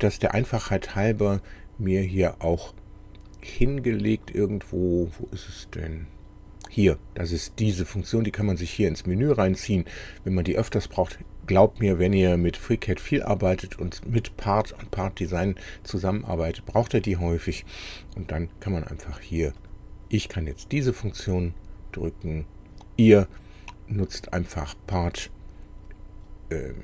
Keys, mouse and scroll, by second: 19.7 click, 22.0 click, 24.1 click.